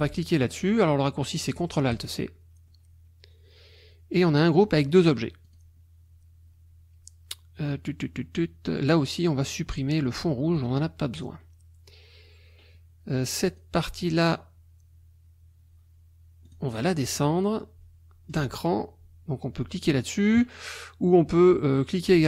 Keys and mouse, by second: 2.0 click, 4.4 click, 5.0 click, 5.5 click, 10.5 click, 13.5 click, 16.5-17.0 drag, 17.1 click.